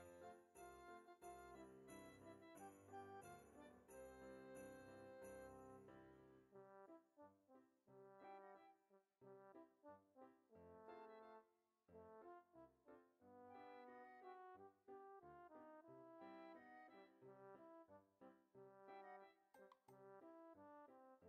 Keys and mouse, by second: 0.6 click, 2.4 middle click, 3.4 click, 5.2 KP_1, 6.1 shift+click, 8.1 ctrl+Tab, 8.6 click, 9.7 ctrl+Tab, 11.9 click, 14.2 click, 15.6 click.